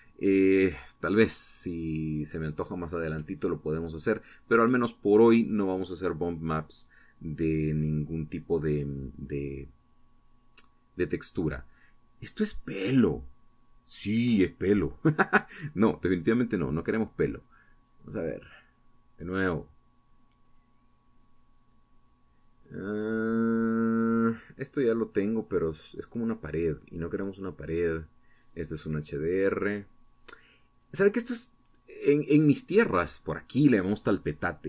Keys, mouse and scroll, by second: 0.0-0.8 scroll down 2, 1.2-1.6 scroll down 1, 4.1 click, 9.1-9.5 scroll down 1, 10.0-10.7 scroll up 3, 11.1-11.8 scroll down 2, 12.1 scroll up 1, 15.1 click, 16.1 click, 17.9 click, 18.8 click, 29.4 click, 33.0 Tab.